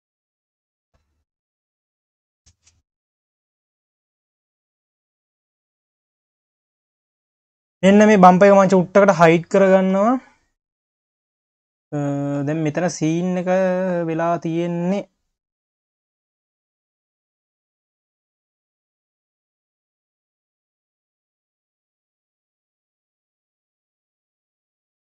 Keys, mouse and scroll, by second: 0.2 ctrl+z, 1.0 click, 1.5 ctrl+s, 1.8 q, 2.3 click, 2.7 Tab, 3.1 scroll down 2, 3.4 q, 4.1 q, 4.7-5.1 scroll up 7, 5.1 q, 5.7 Tab, 6.1 click, 6.6-7.4 scroll down 2, 8.2 click, 8.8 q, 10.2 scroll up 2, 10.5 q, 12.5 scroll up 1, 12.7 q, 15.1 click, 15.9 KP_3, 16.5-17.5 scroll up 1, 17.5 click, 18.0 scroll up 1, 18.0 Tab, 20.4 click, 22.6 click, 23.0 scroll up 1, 23.3 scroll down 5, 24.7 click.